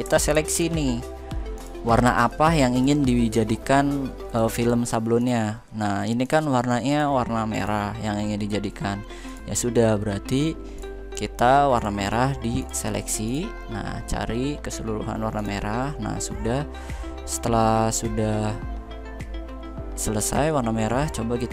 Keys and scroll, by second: 0.2 ctrl+f.